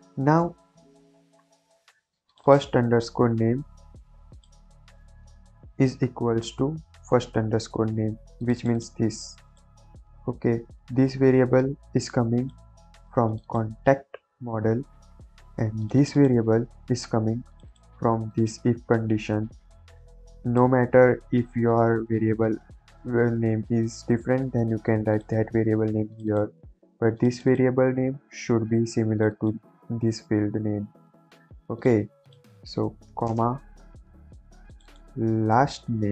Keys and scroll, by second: 3.0 ctrl+c, 5.4 ctrl+v, 5.7 =, 6.8 ctrl+v, 33.0 ,, 33.2 space, 35.6 ctrl+c.